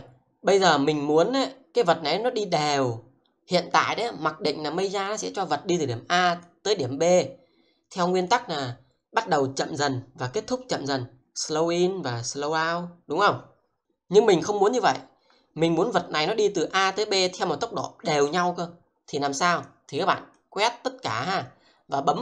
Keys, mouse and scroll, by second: 5.9 click, 16.0 click, 21.4 click.